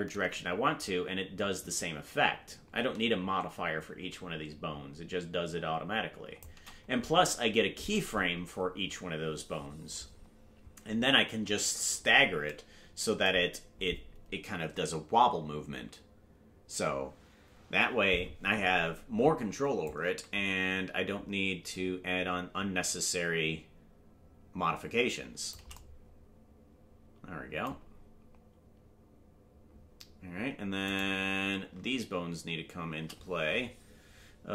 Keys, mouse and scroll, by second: 19.9-25.6 drag, 33.4 right click, 33.4-33.8 scroll up 3.